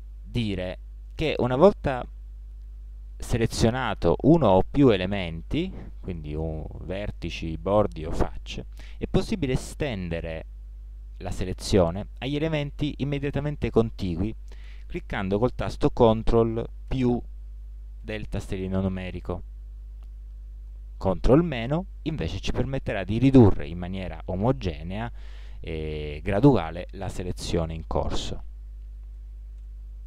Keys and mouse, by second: 17.0 ctrl+KP_Add, 21.7 ctrl+KP_Subtract, 29.2 ctrl+KP_Add.